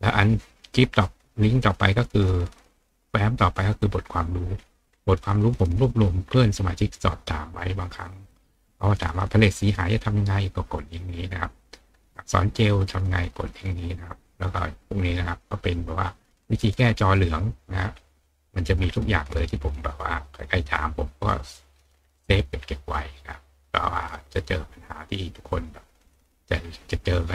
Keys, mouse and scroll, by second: 1.0 click, 4.5-5.3 scroll down 2, 6.0-8.6 scroll down 2, 6.5-8.8 middle drag, 8.6 scroll down 1, 14.4 scroll down 2, 18.8 scroll down 2, 19.0 scroll up 2, 19.3-19.9 scroll down 4, 21.9-22.3 scroll up 2, 22.3 middle click, 22.3-22.9 scroll down 1.